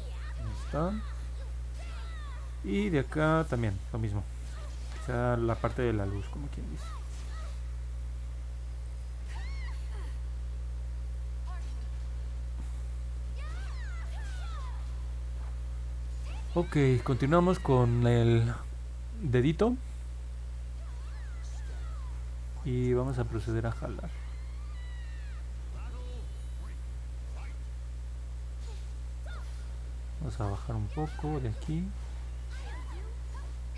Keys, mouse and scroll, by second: 4.6-6.4 drag, 10.5 middle click, 10.5-10.9 scroll down 2, 10.8 middle click, 11.4 middle click, 11.4 scroll down 2, 11.8 scroll up 2, 12.2-13.2 alt+middle drag, 13.6-14.1 scroll down 4, 14.6 alt+middle click, 15.3 scroll down 2, 24.0 click, 24.4 click, 25.1 click, 25.4 click, 25.7 click, 25.9 click, 26.2 click, 26.5 click, 26.8 click, 27.0 click, 27.4 click, 27.6 click, 27.9 click, 28.1 click, 28.4 click, 28.8 click, 29.5 click, 30.0 click, 30.5 click, 30.9 click, 31.5 click, 32.2 click, 32.8 click.